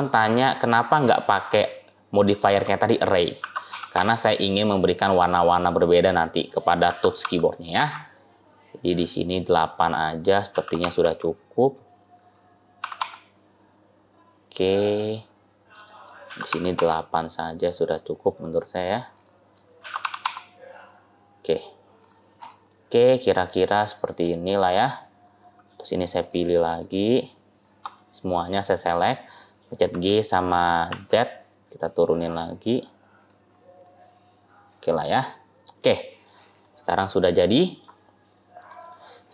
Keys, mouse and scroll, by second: 1.6 shift+middle click, 3.2 shift+d, 6.7 shift+d, 10.4 shift+d, 15.0 middle click, 16.1 shift+d, 19.6 shift+d, 22.2 click, 22.5 middle click, 24.6-25.1 scroll up 1, 25.2 middle click, 26.0 click, 26.5 shift+click, 27.8 middle click, 28.7 middle click, 29.8 g, 33.4-34.3 scroll up 1, 34.3 click, 35.2 scroll down 2, 35.2 middle click, 36.5 middle click, 37.3 middle click, 37.9-38.2 scroll down 2, 38.7 shift+middle click.